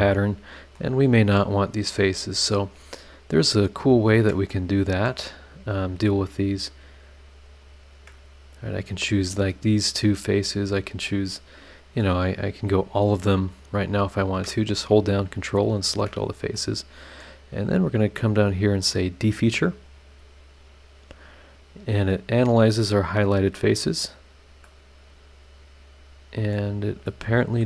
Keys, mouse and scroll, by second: 0.2 click, 3.0 scroll down 1, 3.6 scroll up 1, 4.0 ctrl+right click, 4.5 ctrl+middle click, 4.5 ctrl+scroll up 1, 4.6 ctrl+right click, 5.2 scroll down 2, 5.6 middle click, 5.8 scroll up 1, 6.0 middle click, 6.1 middle click, 6.5 ctrl+right click, 6.7 ctrl+middle click, 7.4 ctrl+right click, 7.7 ctrl+middle click, 10.0-10.6 scroll down 4, 11.0 middle click, 11.1-12.2 drag, 11.2 right click, 11.3 middle click, 11.4 right click, 12.3-12.8 scroll up 4, 13.5 ctrl+click, 14.0 ctrl+click, 15.1 ctrl+click, 15.6 ctrl+click, 16.2 ctrl+scroll down 1, 16.5 middle click, 19.8 click, 24.2 scroll down 2, 24.6 middle click, 24.8-26.7 drag, 25.3 right click, 27.0 middle click.